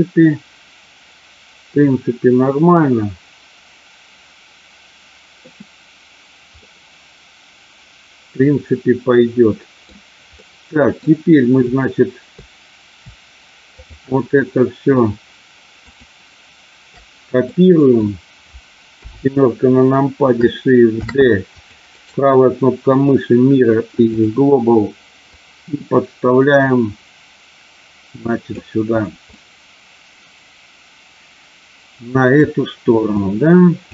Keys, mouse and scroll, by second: 6.7-9.9 middle drag, 10.4 middle click, 15.9 shift+click, 17.4 middle click, 19.0 KP_7, 20.9 shift+d, 21.5 click, 22.0-24.2 right drag, 25.2-28.4 drag, 29.2-32.4 middle drag, 33.1 click.